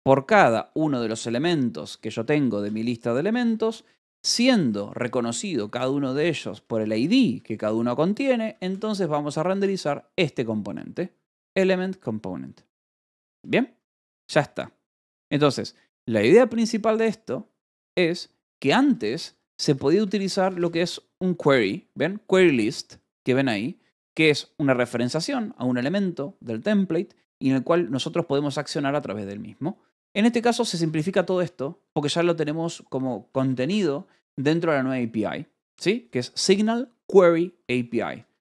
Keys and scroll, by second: 1.3 Escape, 1.7-5.1 typing, 3.2 Escape, 5.9 Escape, 6.2-7.2 typing, 8.1 Escape, 8.3 j, 9.1 shift+v, 9.4 Escape, 11.0 h, 11.3 l, 13.7 ctrl+s, 13.7-14.9 typing, 18.3 j, 19.6-20.9 typing, 30.6 a, 30.9 BackSpace, 32.2 Escape, 32.9 a, 33.2 space, 34.1 BackSpace, 35.0 BackSpace, 37.5-38.4 typing.